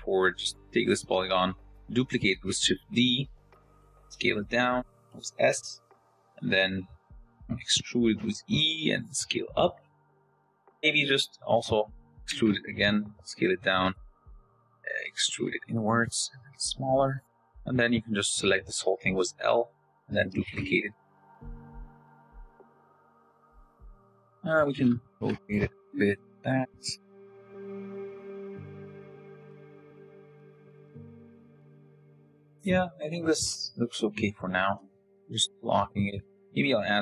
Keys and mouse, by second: 0.3 click, 0.8 middle click, 1.7 shift+d, 3.4 s, 5.8 click, 7.5 e, 8.9 s, 12.3 e, 15.7 s, 18.7 l, 19.2 click, 19.6 shift+d, 22.0 Tab, 22.7-23.7 drag, 24.3 KP_0, 25.5-31.9 typing, 34.6 g.